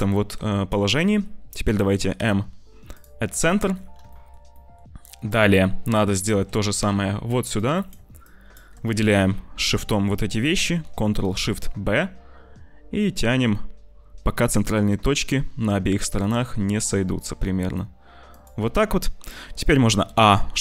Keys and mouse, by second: 0.3 middle click, 2.1 m, 4.1 shift+middle click, 4.5 shift+click, 6.2 shift+click, 7.6 click, 8.1 shift+click, 10.7 ctrl+shift+b, 19.9 a.